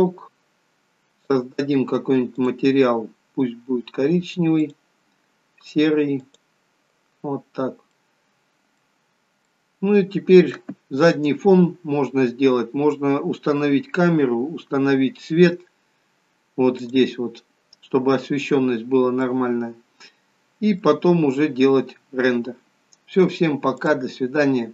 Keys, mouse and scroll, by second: 1.3 click, 2.9 click, 4.6 click, 7.5-8.0 scroll up 2, 8.1 middle click, 9.8 middle click, 17.0 click, 18.7-19.2 scroll down 4, 19.2 middle click, 21.1-21.7 scroll up 5, 21.7-22.3 scroll down 1, 22.3 scroll down 1, 23.9 click.